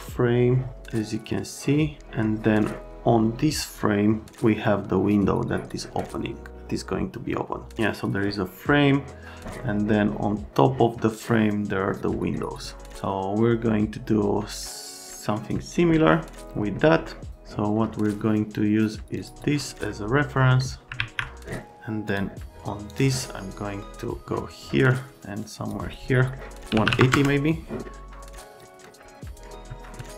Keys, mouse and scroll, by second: 19.1 click, 20.4 middle click, 21.0 alt+q, 22.1 click, 22.9 click, 24.2 click, 26.1 middle click, 26.7 KP_1, 26.8 KP_8, 27.0 KP_0, 27.1 KP_Enter, 28.2 click, 28.5 click, 29.7 alt+middle click, 29.9 middle click, 30.0 alt+middle click.